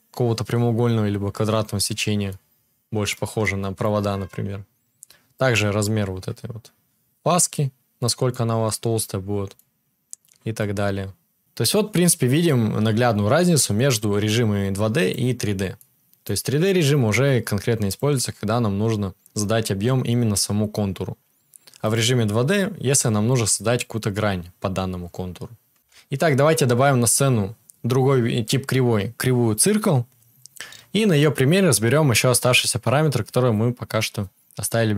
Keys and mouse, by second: 15.1-17.9 middle drag, 17.9-21.9 drag, 21.9-28.8 middle drag, 25.9 shift+a, 26.5 shift+a, 26.6 click, 26.6 right click, 30.8-34.9 drag, 30.8-34.9 right drag.